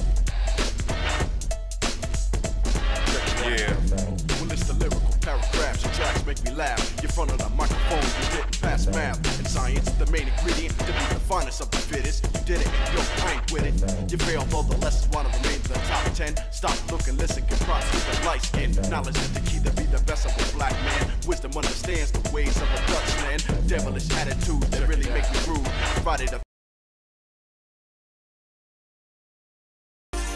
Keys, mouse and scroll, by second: 0.8 click, 3.1-6.6 shift+middle drag, 7.6 click, 7.9 Tab, 9.7 scroll up 1, 9.7 scroll down 1, 9.8 scroll up 1, 13.6 click, 14.6 shift+middle click, 16.2-17.6 shift+middle drag, 20.7 KP_Divide, 28.3 shift+middle click.